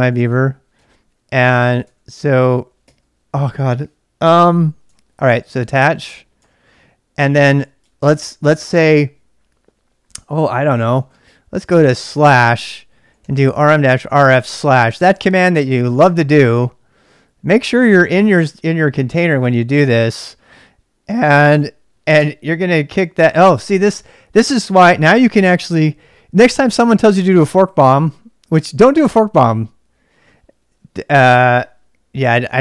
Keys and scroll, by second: 0.0-2.8 typing, 4.3-5.7 typing, 5.5 ctrl+[, 6.4 Return, 7.3-8.1 typing, 10.6-14.4 typing, 11.6 Return, 22.1 Return.